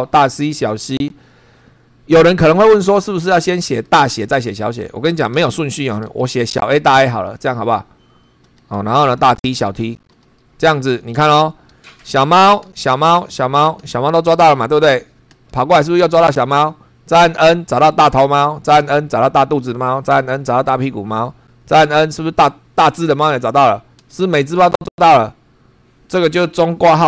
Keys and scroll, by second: 0.9 shift+], 5.3 [, 6.1 a, 6.8 shift+a, 8.4 ], 8.7 [, 9.4 shift+t, 10.1 shift+], 11.3 Return, 12.6 n, 15.3 n, 17.4 n, 18.8 n, 20.1 n, 21.8 n, 24.0 n.